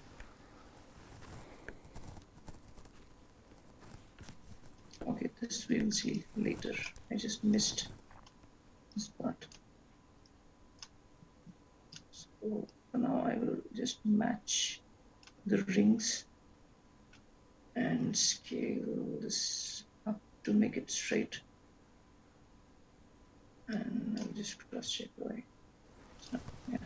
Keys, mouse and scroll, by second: 4.7 click, 5.2-6.0 scroll down 3, 6.0-6.6 scroll down 2, 6.6 click, 7.7 click, 9.3 click, 10.4 click, 11.6 click, 12.9 click, 16.5 click, 20.6 click, 23.9 click.